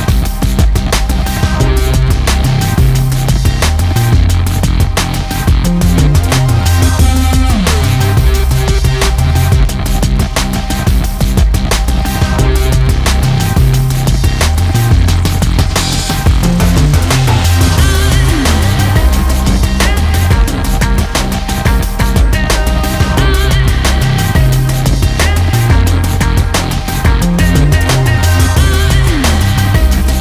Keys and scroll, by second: 4.0 ctrl+Return, 6.1 Delete, 7.5 ctrl+d, 7.9 ctrl+space, 28.6 ctrl+space, 29.1 ctrl+space, 29.3-30.2 ctrl+space.